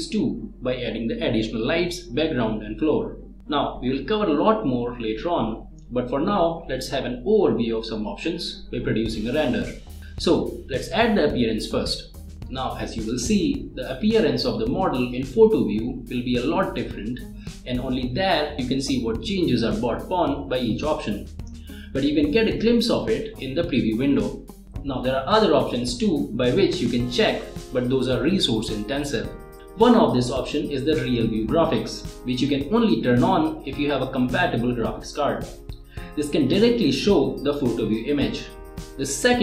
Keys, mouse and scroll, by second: 10.5 click, 16.0 click, 16.1 space, 16.7 space, 17.9-19.0 click, 20.1-21.2 middle drag, 21.3 scroll up 1, 21.6-22.6 middle drag, 23.1 scroll down 1, 25.5-26.3 middle drag, 34.3 click, 37.4 click.